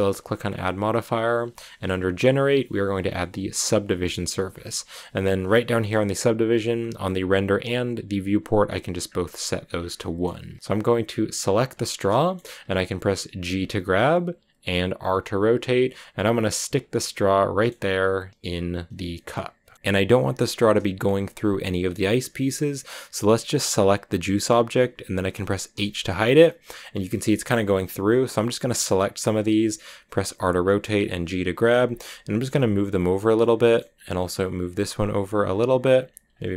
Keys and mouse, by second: 0.3-3.6 drag, 8.0 click, 9.8 drag, 10.5 shift+a, 11.3 drag, 11.7 shift+drag, 11.9 drag, 13.3 g, 14.5 click, 14.9 r, 15.5 click, 15.7 g, 16.5 click, 16.8 click, 17.7 r, 18.4 click, 18.6 g, 19.0 click, 23.7 click, 26.3-27.4 drag, 26.3 h, 28.8 click, 29.5 r, 30.3 click, 30.5 g, 30.9 click, 30.9 r, 31.2 click, 31.3 g, 31.7 click, 31.9 middle click, 32.4 g, 33.0 click, 33.2-33.6 middle drag, 34.2-36.2 typing, 34.6 click, 35.1 click, 35.8 click, 36.2 click.